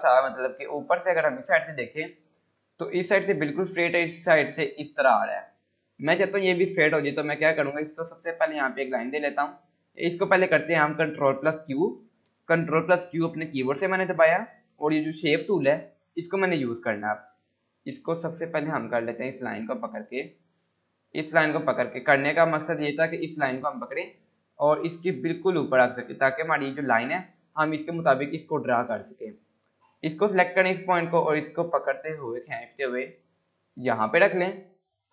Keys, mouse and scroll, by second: 2.3 scroll up 1, 7.5-9.7 drag, 12.7 click, 13.0 ctrl+q, 16.3 click, 17.1 scroll up 1, 18.7 click, 22.9 scroll up 1, 24.1-26.0 drag, 26.2 scroll down 1, 27.8 click, 29.5 scroll up 1, 31.1-33.5 click, 34.3 scroll up 1.